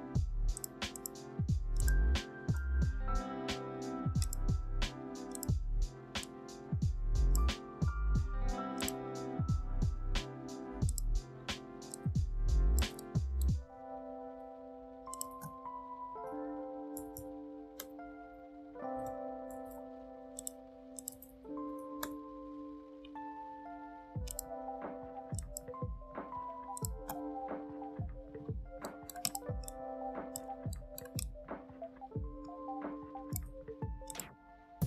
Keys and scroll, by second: 15.1 ctrl+a, 15.7-16.8 typing, 17.7 Return, 18.0 typing, 19.3 ctrl+shift+f, 21.3-23.7 typing, 27.4 Delete.